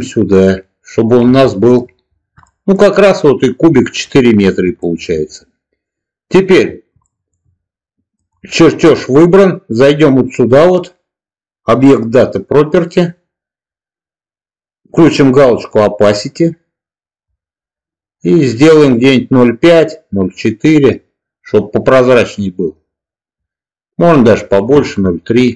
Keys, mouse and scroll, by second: 1.3-1.7 shift+middle drag, 2.3 shift+middle click, 3.8 shift+middle drag, 4.7 shift+middle click, 6.9 shift+middle drag, 16.0 click, 17.3-24.5 drag, 25.3-25.5 shift+middle drag.